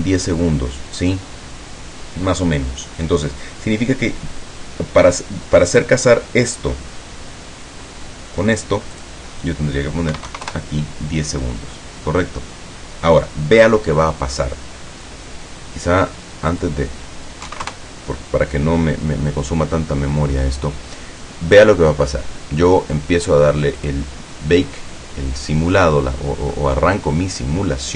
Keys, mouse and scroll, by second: 9.0 click, 10.2 KP_1, 10.6 KP_Enter, 16.6 click, 17.6 KP_5, 17.8 KP_Enter, 23.9 click, 26.2-26.5 scroll down 2, 26.6-27.9 middle drag.